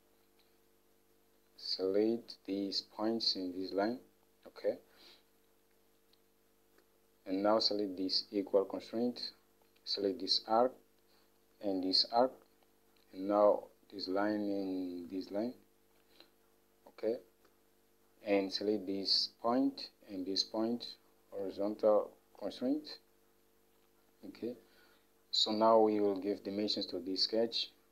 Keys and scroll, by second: 6.9 Escape, 17.6 Escape.